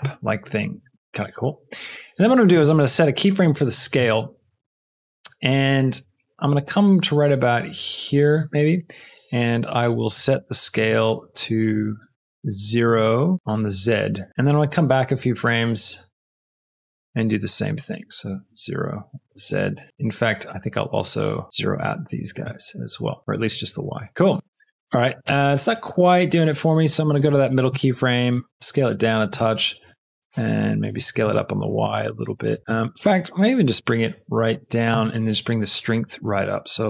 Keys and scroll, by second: 11.6 s, 11.9 z, 13.3 Return, 13.3 KP_0, 18.3 KP_0, 18.5 Return, 19.9 i, 21.7 KP_0, 22.5 Return, 23.2 i, 24.1 space, 28.3 s, 28.5 z, 29.8 s, 30.9 s, 31.1 y.